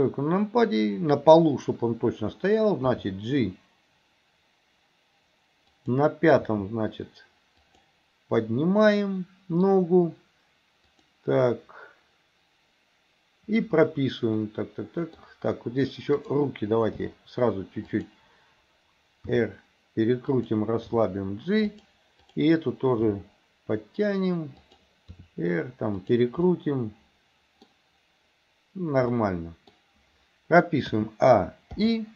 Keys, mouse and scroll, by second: 2.8 g, 6.5 g, 10.9 click, 14.5 middle click, 16.2 click, 16.9 g, 19.3 r, 21.0 g, 22.2 click, 23.2 g, 25.2 r, 26.5-28.1 middle drag, 29.2 middle click, 31.0 a, 31.8 i.